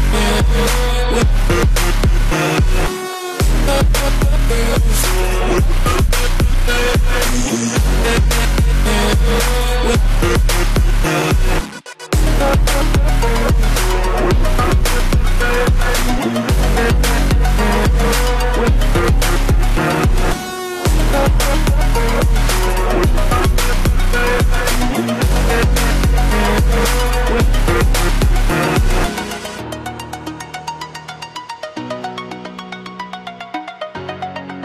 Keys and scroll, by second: 11.7 ctrl+0, 12.4 ctrl+-, 14.0 ctrl+=.